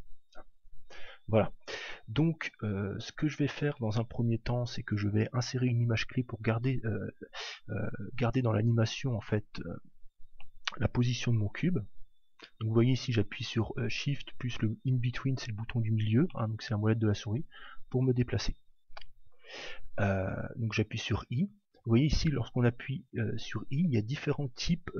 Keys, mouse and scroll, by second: 10.4-12.3 shift+middle drag, 16.3-18.3 middle drag, 21.0 i.